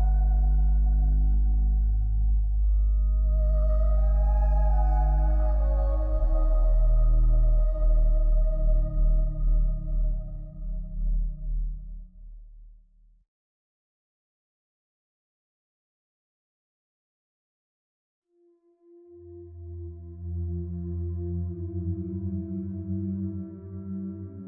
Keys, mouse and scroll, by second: 3.3 click, 4.9 click, 7.3 click, 16.2 click.